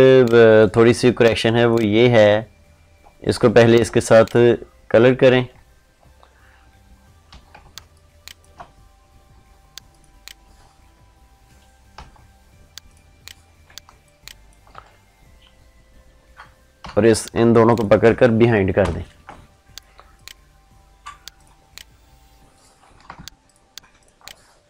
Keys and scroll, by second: 7.5 ctrl+space, 13.6 ctrl+space, 18.6 ctrl+shift+[.